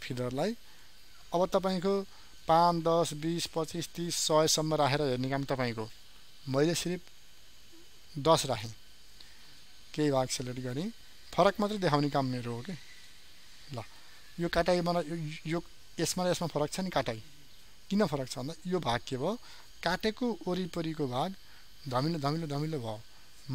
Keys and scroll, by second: 13.9 ctrl+d.